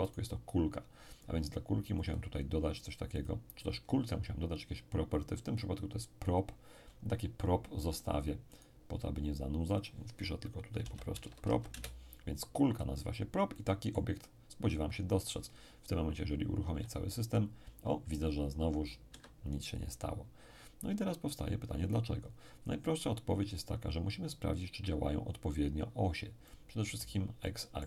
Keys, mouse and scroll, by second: 0.1 right click, 2.0-4.2 drag, 8.5 right click, 9.7 click, 10.8 p, 11.1 r, 11.2 o, 11.4 p, 11.7 Return, 13.5-14.9 middle drag, 16.7 p, 19.1 Escape, 26.4-27.8 middle drag.